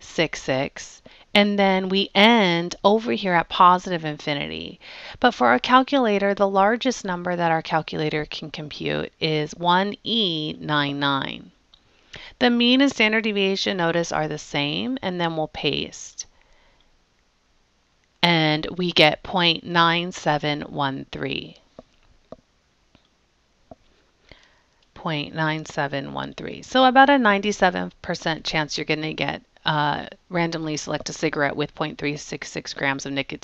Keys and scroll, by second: 0.5 6, 0.9 6, 2.0 Down, 6.9 1, 9.4 ,, 10.6 9, 10.9 9, 12.3 Down, 13.0 Down, 14.1 Down, 16.2 Return, 16.9 Return.